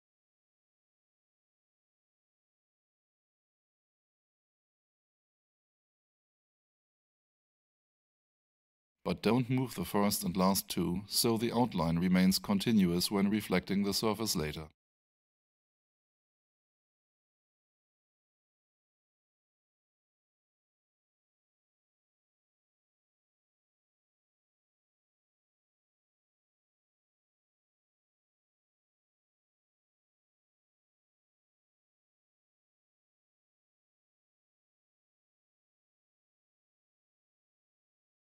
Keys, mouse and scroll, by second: 5.7 alt+shift+middle click, 7.0 shift+right click, 7.8 click, 10.2 alt+shift+right click, 13.1 F8, 14.4 click, 18.8 alt+click, 19.0 alt+shift+middle click, 19.8 alt+shift+click, 20.6 alt+shift+middle click, 22.5 click, 25.8 click, 28.3 ctrl+c, 29.6 right click, 32.2 click, 34.3 alt+shift+click.